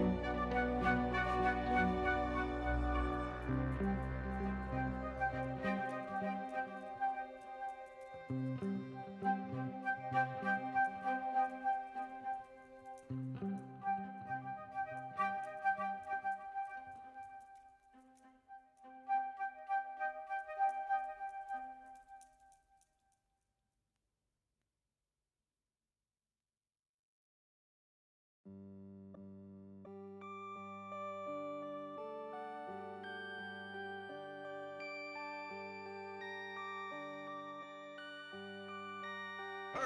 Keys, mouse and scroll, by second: 0.5 click, 1.8 s, 4.9 middle click, 5.2 ctrl+r, 6.9 click, 7.2 2, 7.9 alt+click, 8.5 shift+click, 8.9 click, 10.1 click, 12.2 r, 18.0 s, 22.8 s, 25.4 m, 26.7 click, 27.6 1, 28.0 click, 29.2 click, 29.8 click, 30.1 click, 31.6 g, 32.5 Tab, 33.2 ctrl+3, 33.5 right click, 35.4 click, 35.7 click, 36.5 drag, 36.7 shift+middle drag, 37.3 s, 39.3 g.